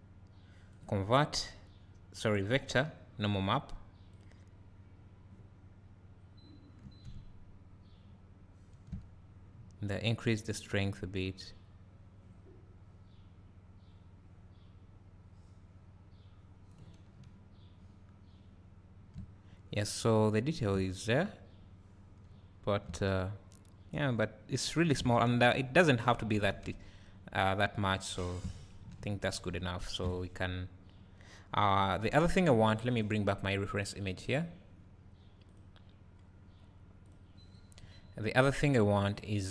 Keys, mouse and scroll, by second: 3.4 click, 7.1 `, 10.7-39.5 drag, 17.2 `, 19.5 scroll down 1, 20.9 scroll up 1, 21.8-22.4 scroll down 1, 25.6-26.6 scroll down 2, 26.6 scroll down 1, 30.0 KP_0.